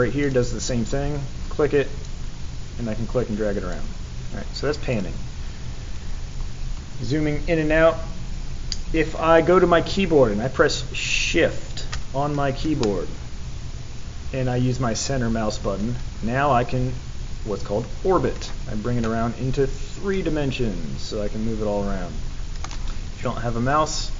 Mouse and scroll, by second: 0.2 click, 2.0-3.7 drag, 4.9 click, 6.0-6.4 scroll up 2, 12.8-17.0 middle drag, 17.0-18.7 middle drag, 18.8-22.6 middle drag.